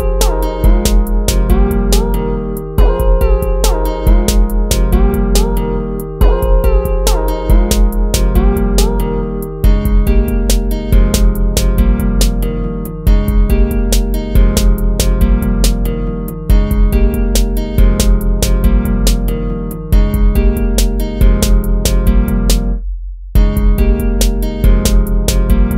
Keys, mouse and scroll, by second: 0.6 ctrl+z, 4.1 ctrl+-, 10.2 ctrl+z, 14.4 ctrl+-, 20.6 ctrl+-, 22.1 ctrl++, 22.4 ctrl+-, 23.0 ctrl++, 23.4 ctrl++.